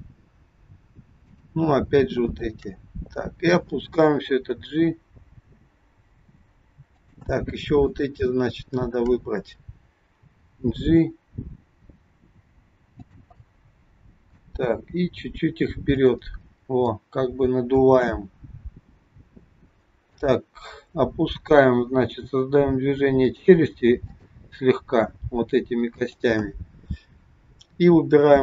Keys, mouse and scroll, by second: 1.2 shift+click, 4.2 g, 7.8 shift+click, 10.2 g, 13.4 middle click, 13.4 scroll up 1, 15.0 g, 16.5-16.8 scroll down 2, 16.8 middle click, 18.0 KP_1, 20.0 click, 22.1 g, 24.0 click, 25.0 g.